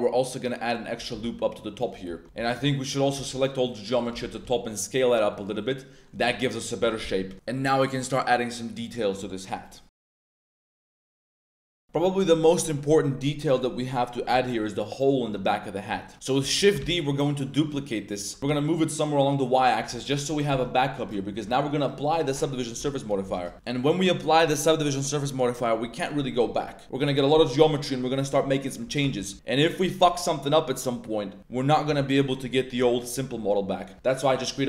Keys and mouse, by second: 0.9 click, 1.1 Tab, 1.2-1.8 middle drag, 2.1 Tab, 2.2 c, 3.1 c, 3.9 click, 4.1 z, 4.4 s, 5.3 click, 5.6 middle click, 6.2 Tab, 6.2-6.7 middle drag, 6.8 Tab, 7.0-7.5 drag, 7.5-8.4 middle drag, 7.5 a, 8.9-9.5 middle drag, 9.6 middle drag, 11.8 middle click, 11.8 a, 13.9 middle click, 14.3 middle click, 15.8 middle drag, 16.1 z, 16.2 click, 16.7 shift+z, 16.9 shift+d, 18.4 y, 19.5 click, 19.8 Tab, 20.5 1, 21.4 Tab, 21.7 click, 22.7 n, 23.2 Tab, 23.5 2, 23.6 click, 24.0 middle click, 28.5-28.8 middle drag, 29.0 Tab, 29.1 middle click, 29.3 Tab, 32.2 middle click, 33.1 click, 33.9 Tab, 34.2 click.